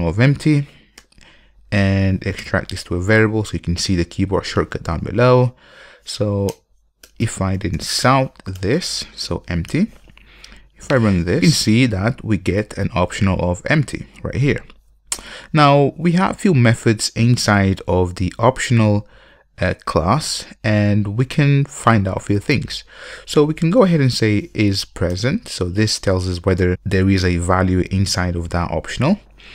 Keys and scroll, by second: 2.6 alt+super+v, 8.6 Return, 25.1 Return.